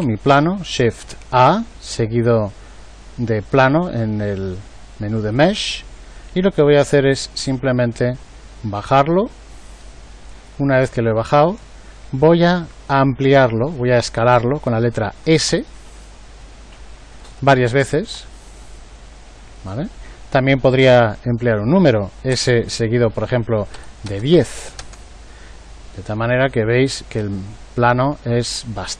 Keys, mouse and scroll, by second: 0.1 shift+a, 15.5 s, 18.1 s, 22.3 s.